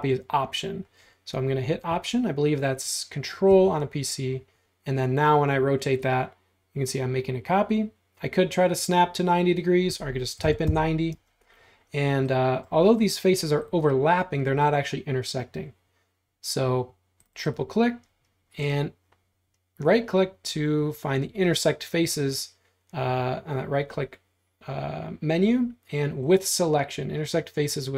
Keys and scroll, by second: 10.2-11.3 typing.